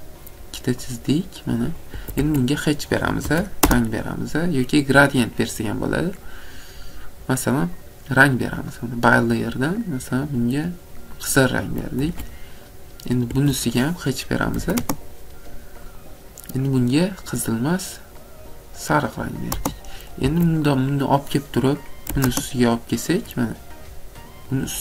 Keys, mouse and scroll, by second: 1.0 click, 1.8 click, 2.0 Escape, 2.3 Escape, 3.0-3.7 typing, 7.2 typing, 7.8 click, 8.8 click, 11.3 click, 12.1 Escape, 12.7 click, 13.4 Escape, 14.6 typing, 15.9 typing, 16.0 click, 17.3 typing, 17.5 click, 19.2 click, 20.3 Escape, 20.8 click, 22.1 m, 23.4 click, 24.4 click.